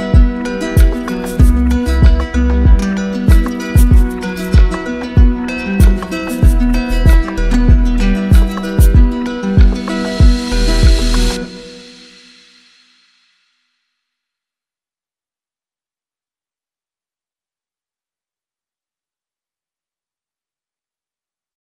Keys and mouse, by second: 3.0-4.2 drag, 5.4-7.3 typing, 11.3-12.4 drag, 13.2-14.3 drag, 17.1-18.2 drag, 18.4-19.5 drag, 20.3-21.4 drag.